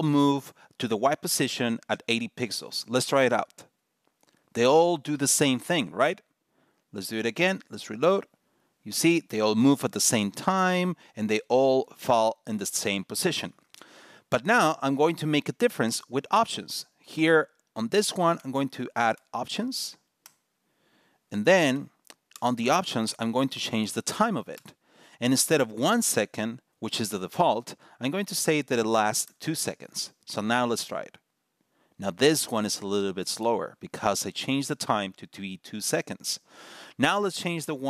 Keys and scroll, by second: 7.2 super+r, 8.6 super+r.